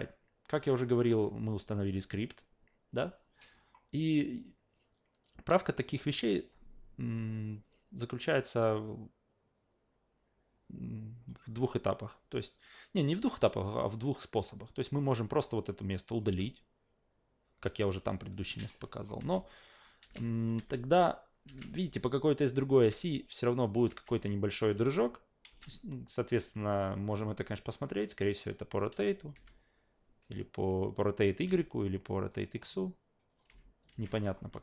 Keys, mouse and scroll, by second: 4.7-11.3 drag, 15.3-16.2 drag, 16.3 Delete, 18.7-19.0 drag, 19.2 alt+v, 20.0 alt+v, 20.4 click, 20.6 alt+v, 21.4 alt+v, 21.7 click, 22.1-22.7 alt+drag, 22.8 alt+v, 23.0 alt+click, 23.9 alt+v, 24.6 click, 24.8 alt+v, 25.5 alt+v, 28.1 ctrl+click, 29.0 drag, 29.3 f, 30.3 ctrl+click, 31.2 click, 31.4 f, 32.2 click, 33.3 click, 33.5 alt+v, 33.9 alt+v, 34.2 click, 34.5 alt+v.